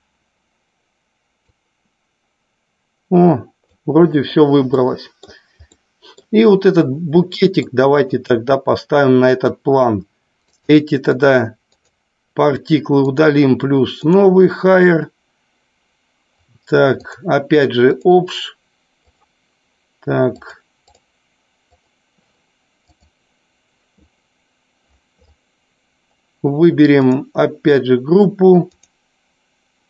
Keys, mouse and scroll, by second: 1.8-4.0 drag, 4.3 click, 5.0-5.4 middle drag, 5.9-6.4 middle drag, 7.5-7.9 shift+middle drag, 8.3 click, 10.9 click, 11.4 click, 11.9 click, 13.3 click, 14.3 click, 17.3 click, 19.3-21.3 drag, 21.9 click, 27.3-29.4 drag.